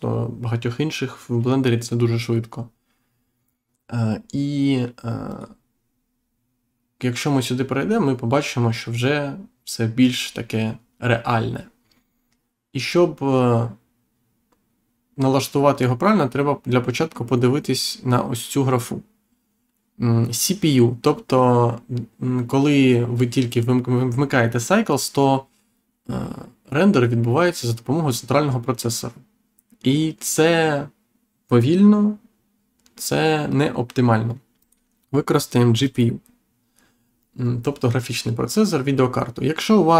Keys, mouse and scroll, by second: 5.2 click, 34.5 click, 35.8 click.